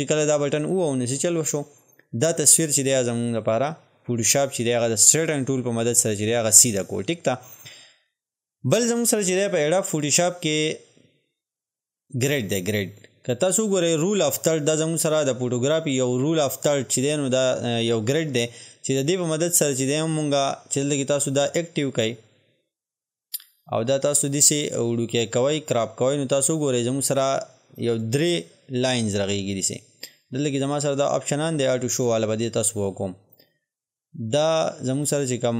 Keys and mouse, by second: 0.5 click, 12.5-18.7 drag, 21.0 click, 23.9-30.3 drag, 30.3-35.0 drag.